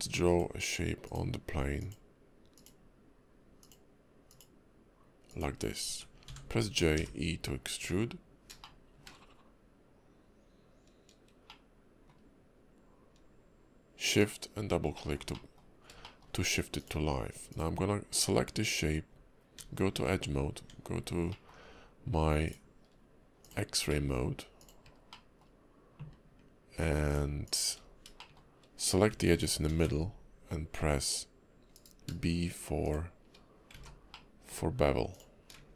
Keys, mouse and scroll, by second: 8.6 shift+middle click, 11.5 middle click, 14.9 middle click, 15.3 middle click, 15.8 scroll up 1, 16.0 shift+middle click, 16.8 click, 17.5 click, 19.6 Tab, 20.0 Tab, 21.3 middle click, 21.6-22.5 scroll up 2, 22.5 click, 23.4 shift+click, 23.9 shift+middle click, 24.6 shift+click, 25.1 shift+middle click, 27.1 shift+click, 27.4 shift+click, 27.8 scroll down 3, 28.2 shift+middle click, 29.7 ctrl+b, 32.8 shift+click, 33.7 ctrl+z, 34.1 middle click, 34.6-35.1 scroll down 1, 35.1 shift+click.